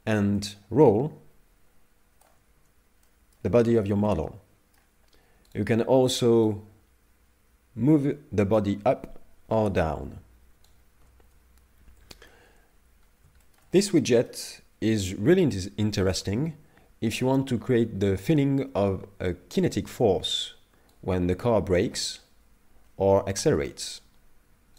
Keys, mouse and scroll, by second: 0.4 click, 2.5 ctrl+z, 3.1 middle click, 3.7 shift+middle click, 4.1 middle click, 5.5 right click, 6.5 right click, 6.6 right click, 11.0 ctrl+z, 11.9 KP_3, 13.1-13.4 scroll down 2, 13.4 shift+middle click, 13.7 middle click, 21.0 right click.